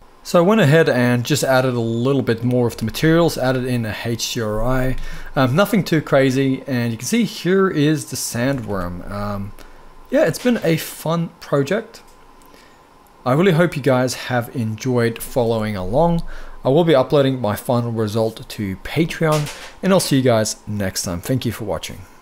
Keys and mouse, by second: 2.3 z, 8.2 ctrl+s, 8.4 ctrl+s, 8.6 z, 10.0 drag, 13.2-13.5 middle drag.